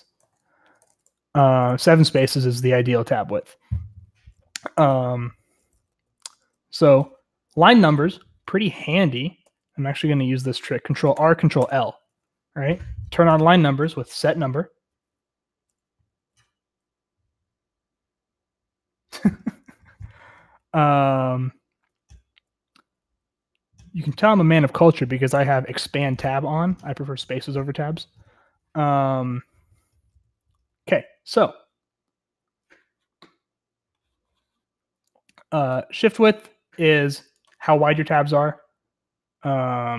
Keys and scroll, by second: 0.2 Escape, 0.3-2.2 typing, 4.9-7.4 typing, 9.1-9.9 typing, 11.1 ctrl+r, 11.5 ctrl+l, 11.5 :, 13.5 Return, 20.1-22.3 j, 28.1 k, 28.3 k, 30.6 k, 30.8 k.